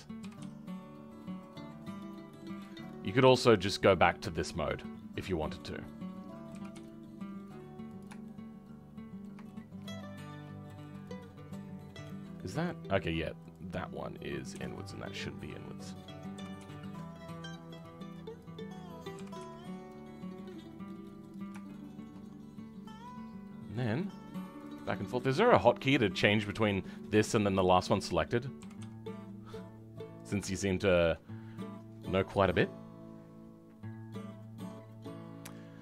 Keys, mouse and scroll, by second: 0.2 g, 8.2-11.0 shift+middle drag, 11.0 click, 11.7 middle click, 12.2 middle click, 13.4 click, 14.4 KP_7, 16.4 g, 21.6-23.6 shift+middle drag, 23.6 click, 28.6 g, 30.5-35.8 shift+middle drag.